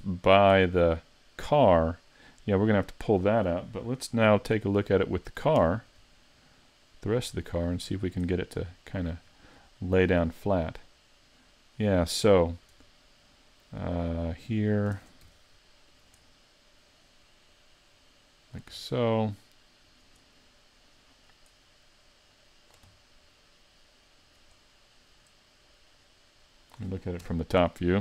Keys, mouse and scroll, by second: 0.1 shift+middle click, 0.6 middle click, 5.6 Tab, 7.1 shift+click, 7.6 shift+click, 8.0-8.3 scroll down 3, 8.3 middle click, 9.3 scroll up 4, 9.8 shift+middle click, 10.3-10.7 scroll up 2, 10.8 middle click, 12.8 Tab, 13.1 middle click, 14.3 right click, 14.9 ctrl+Tab, 15.9 right click, 16.3 middle click, 17.5 click, 18.8 middle click, 19.9 right click, 20.4 middle click, 22.3 click, 22.9 middle click, 24.2 right click, 24.6 middle click, 26.0 click, 27.2 KP_7.